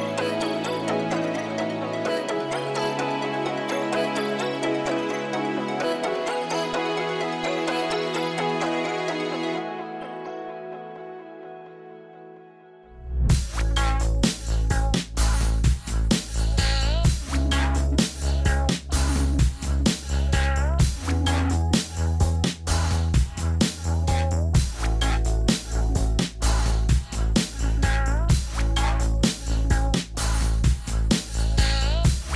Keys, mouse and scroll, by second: 18.1 scroll up 1, 19.1-19.7 scroll down 1, 28.0-28.4 scroll down 1, 28.5-30.4 scroll up 1, 30.9 click, 31.6 click.